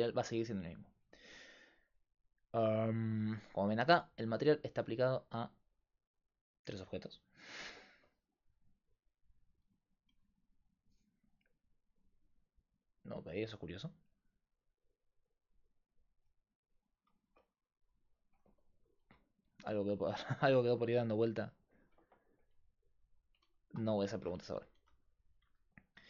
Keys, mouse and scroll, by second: 0.6-2.9 drag, 10.2 right click, 11.5-13.7 drag, 13.7-16.6 right drag, 14.4-15.7 drag, 19.9 right click, 22.2-24.8 drag, 24.8 g, 25.9-26.0 drag.